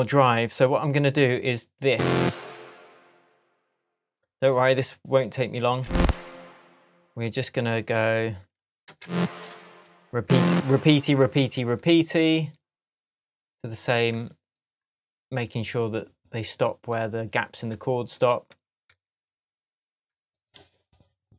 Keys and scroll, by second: 5.7 space, 8.9 space, 18.5 super+d.